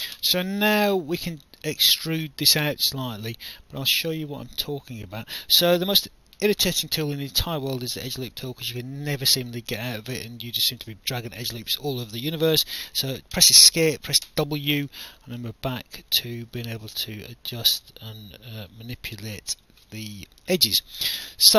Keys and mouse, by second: 1.0 alt+click, 3.3 alt+click, 7.0 alt+click, 10.8 alt+click, 13.4 Escape, 14.3 w, 15.2 alt+click, 17.8 alt+click, 19.8 alt+middle click.